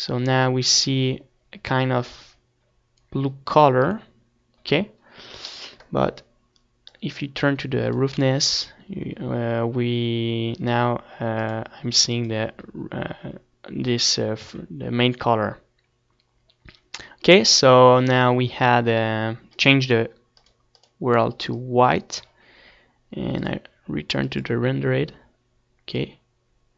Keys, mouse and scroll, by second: 0.0-1.5 drag, 1.5 Tab, 1.9 Tab, 2.5 right click, 2.7-4.0 drag, 5.6-6.8 middle drag, 6.8-8.8 scroll up 1, 8.8-10.2 scroll up 1, 12.6-14.3 drag, 13.2-13.8 scroll up 1, 15.4-17.0 middle drag, 17.0-19.0 drag, 19.8-23.4 middle drag, 20.1 shift+a.